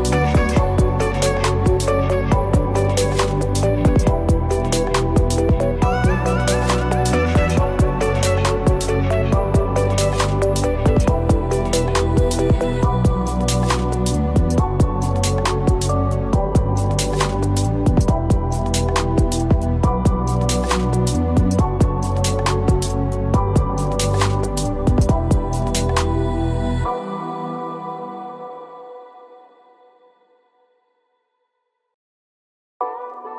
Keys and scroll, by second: 4.6 ctrl+t, 17.0 ctrl+=.